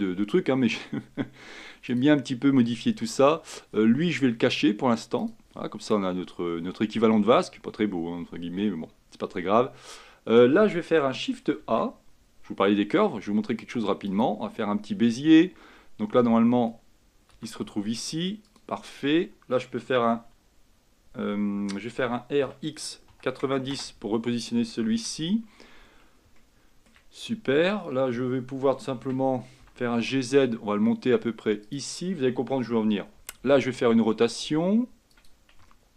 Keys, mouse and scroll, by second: 2.0-5.1 drag, 5.3-8.4 drag, 11.7 shift+a, 17.5 s, 22.1 r, 25.2 Tab, 25.3-25.8 scroll up 3, 25.8-26.5 scroll down 1, 26.5 shift+middle click, 27.4-28.1 scroll down 1, 29.1 Tab, 29.7 g, 33.9 r, 35.8-35.9 shift+middle drag.